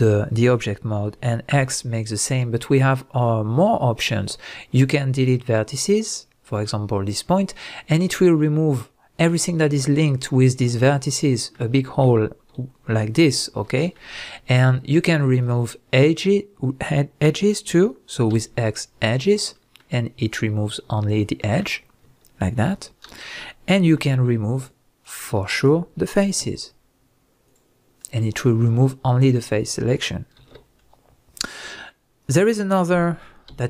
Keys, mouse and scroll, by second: 1.5 x, 13.2 ctrl+z, 15.4 shift+click, 18.3 x, 19.5-24.6 middle drag, 22.7 ctrl+z, 24.6 shift+drag, 25.0 shift+drag, 26.4 x, 28.0-33.6 middle drag, 30.4 ctrl+z, 33.5 x.